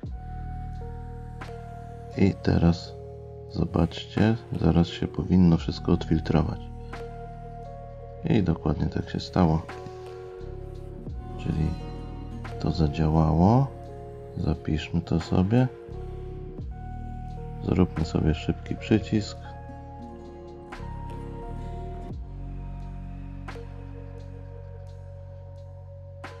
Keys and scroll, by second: 0.1 F8, 6.7 F8, 8.5 F8.